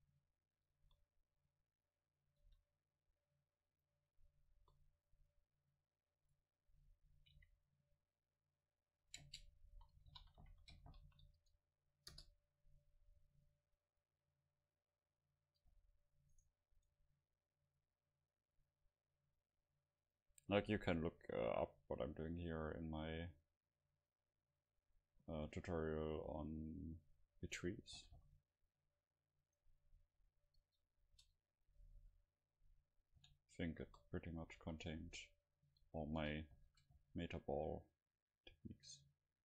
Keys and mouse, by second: 0.7 click, 0.8 KP_0, 1.4 KP_7, 2.5 shift+d, 3.9-5.6 drag, 4.6 KP_0, 6.3 right click, 7.4 alt+c, 9.0 a, 9.2 space, 15.7 Delete, 16.4-18.4 right drag, 17.7-20.4 drag, 21.5-24.0 drag, 24.6-26.5 drag, 26.5 middle click, 26.6-28.4 drag, 28.0 g, 29.6-31.5 right drag, 30.0 h, 31.2 ctrl+z, 32.1 KP_7, 32.6-33.8 middle drag, 33.2 g, 33.8 click, 33.9 KP_0, 34.6 s, 35.7 h, 36.0-37.5 drag, 36.7 ctrl+z, 37.0 g.